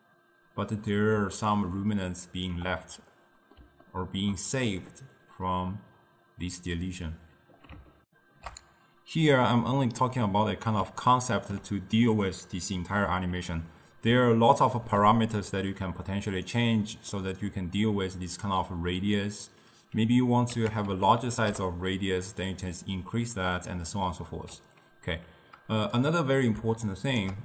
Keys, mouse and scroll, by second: 1.4 d, 1.6-2.6 drag, 2.6 d, 3.2-7.0 middle drag, 8.1 ctrl+alt+shift+q, 10.3-12.8 middle drag, 12.8-13.7 scroll up 1, 14.5-15.4 ctrl+middle drag, 15.4 click, 16.9-19.1 middle drag, 19.1-22.2 drag, 25.2 middle click, 26.0 click, 26.9 shift+right click.